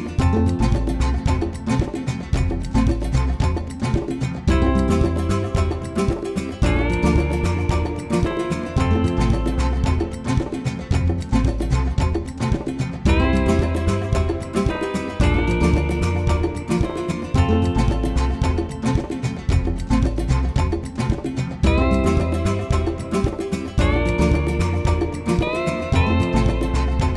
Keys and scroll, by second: 0.0-1.4 typing, 3.2 super+8, 3.5-6.9 typing, 5.4 super+8, 8.5 super+8, 9.2 s, 11.1 super+8, 12.1-12.5 typing, 13.9 super+8, 14.1-18.8 typing, 15.6 super+8, 17.7 super+8, 19.9 super+8, 20.2-22.4 typing, 21.7 Left, 21.8 Left, 22.0 Left, 25.1 super+8, 25.5 Right, 25.6-27.1 typing, 25.8 Right.